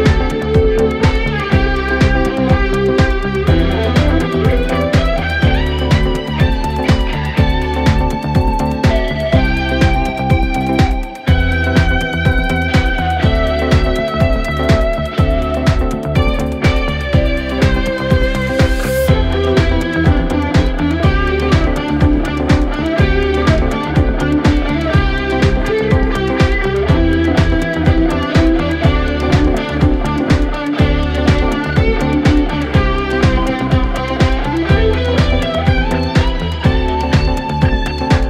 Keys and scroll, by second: 1.3 p, 2.0 p, 2.7 4, 3.5 ctrl+z, 5.8 4, 6.1 3, 14.7 l, 16.1 k, 17.3 9, 17.4 Return, 20.3 l, 21.4 k, 22.1 0, 22.2 Return, 24.5 h, 26.0 e, 27.6 -, 27.8 Return, 29.5 l, 31.2 h, 32.7 e, 34.0 -, 34.0 0, 34.1 Return, 37.3 1, 37.9 ctrl+d, 38.1 Escape.